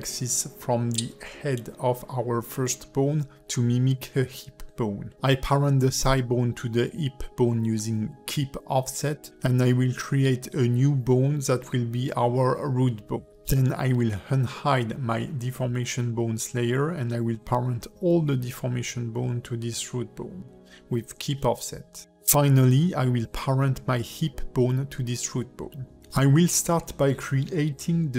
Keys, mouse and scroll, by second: 0.9 click, 2.1 click, 2.9 a, 3.5 Tab, 3.5 click, 4.3 Tab, 4.6 click, 5.3 shift+click, 6.3 ctrl+p, 7.6 Tab, 8.2 shift+middle click, 11.0 click, 11.5 click, 11.7 shift+middle click, 12.0 Tab, 12.3 click, 12.8 e, 13.6 shift+click, 14.9 shift+click, 15.8 click, 16.5 click, 17.9 click, 18.5 a, 19.0 shift+click, 19.4 shift+click, 20.3 ctrl+p, 22.6 click, 23.1 click, 23.9 click, 24.8 shift+click, 25.7 ctrl+p, 26.9 Tab, 27.4 shift+middle click.